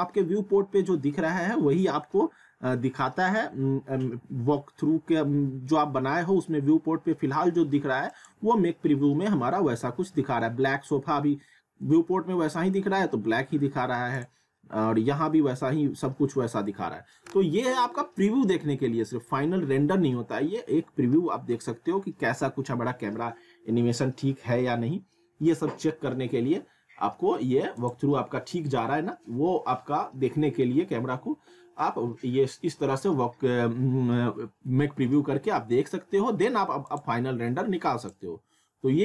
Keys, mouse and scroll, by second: 8.1 click, 14.2 click, 27.8 click, 36.9 click, 37.1 click.